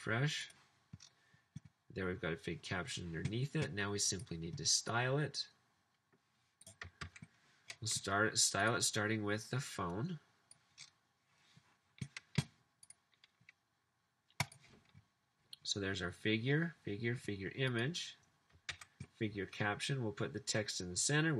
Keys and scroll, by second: 7.0 super+c, 18.7 super+v.